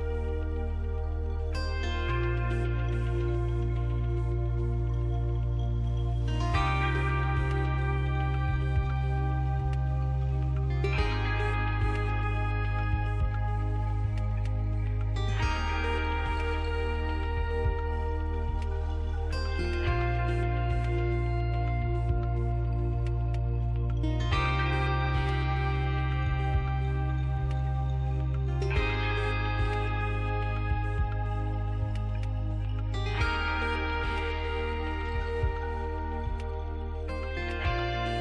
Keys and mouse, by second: 0.4 middle click, 0.5 click, 0.7 middle click, 0.9 e, 4.1-8.3 drag, 5.2 e, 8.4 e, 10.2 e, 11.5 e, 12.6 e, 13.9 e, 15.1 e, 17.1 shift+c, 21.3 shift+s, 26.2-29.1 drag, 30.1 a, 30.5 a, 31.3 KP_7, 33.9 alt+r, 35.6-37.9 drag.